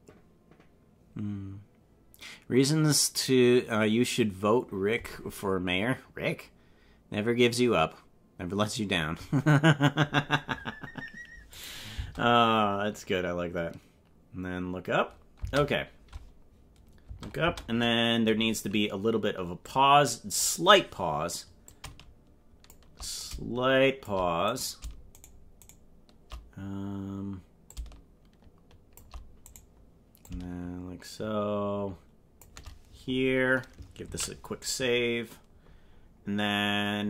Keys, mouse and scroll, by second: 11.5 click, 11.9 space, 15.4 space, 17.1 space, 17.5 space, 19.6 click, 21.7-22.7 shift+drag, 23.1 shift+click, 24.5 right click, 25.2 shift+right click, 25.7 right click, 27.7-28.9 shift+drag, 29.5 right click, 30.2-32.3 shift+drag, 34.1 ctrl+s.